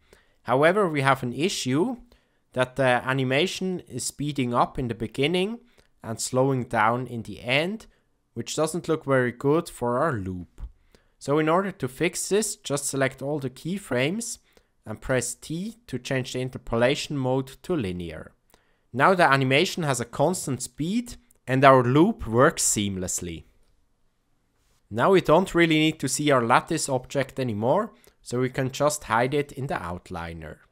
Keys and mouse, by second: 0.9 click, 1.7-11.9 drag, 15.0 t, 18.8 space, 24.8 space.